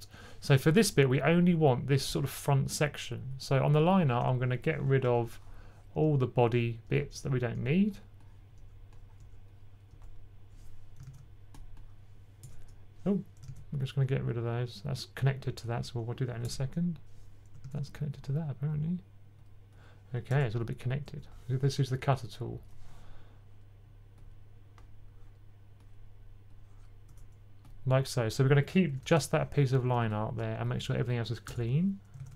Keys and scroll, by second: 10.9 super+z, 13.4 super+z, 17.5 super+z, 28.9-29.5 typing, 32.1 super+a.